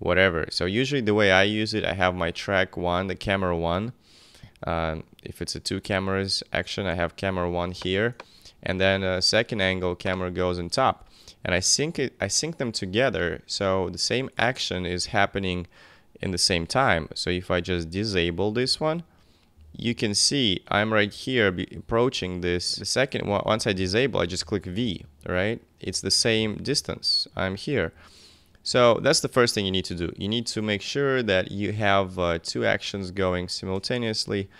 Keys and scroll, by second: 8.8 BackSpace, 18.6 v, 22.5 v, 23.2 v, 27.9 v.